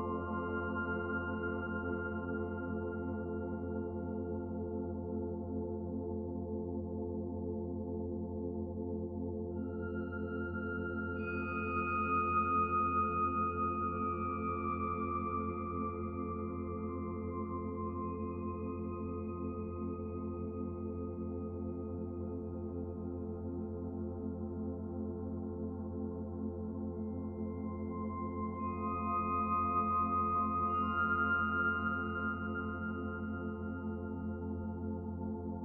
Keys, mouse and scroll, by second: 0.8 s, 2.1-2.5 scroll up 1, 2.6 middle click, 3.4 scroll down 1, 3.6 middle click, 4.7 shift+middle click, 6.0 shift+d, 7.7 click, 8.7 click, 11.0 s, 13.0 s, 17.6 ctrl+a, 19.5 click, 21.5 click, 22.8 middle click, 23.8 r, 27.1 click, 29.3-29.6 scroll down 2, 29.6 middle click, 31.0-31.8 scroll up 2, 31.8 middle click, 32.5-33.3 scroll down 4, 33.5 middle click, 34.5 scroll up 1, 34.9 shift+middle click, 35.4 middle click.